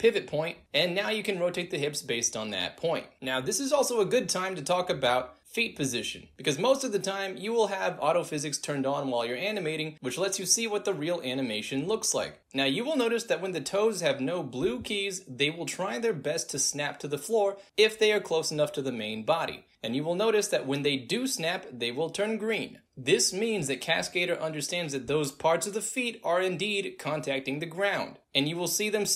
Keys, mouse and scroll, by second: 1.0-2.9 drag, 2.9 w, 3.4-7.1 drag, 7.2 space, 10.3 click, 10.5 space, 11.4-12.0 alt+drag, 12.4 alt+right click, 12.6 alt+middle drag, 12.8 alt+right click, 13.3 alt+drag, 13.7-14.1 alt+middle drag, 14.3 drag, 14.4 alt+right drag, 15.2-21.1 drag, 22.6-23.3 drag, 25.6 ctrl+z, 26.9-27.8 drag, 28.3-29.1 drag.